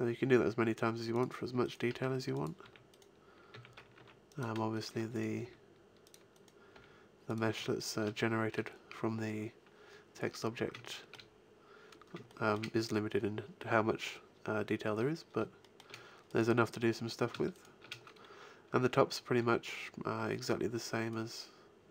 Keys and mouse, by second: 1.8 g, 2.6 a, 3.5 a, 4.0 ctrl+r, 5.4 g, 6.7 g, 7.5 a, 8.2 middle click, 10.3 middle click, 13.9-15.0 middle drag, 15.1 middle click, 16.2 middle click, 18.2 shift+click, 19.1 middle click, 19.9 middle click, 20.4-21.9 drag, 21.1 right click.